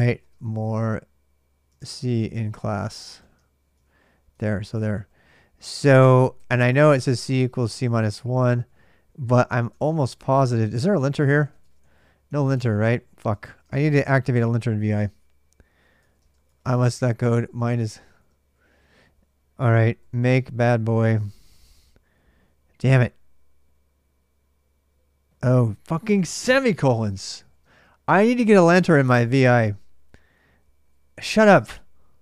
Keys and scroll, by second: 0.0-14.3 typing, 15.8 ctrl+[, 15.9-21.7 typing, 25.2 ctrl+[, 25.3 k, 25.5 k, 26.2 Return, 26.6-29.7 typing.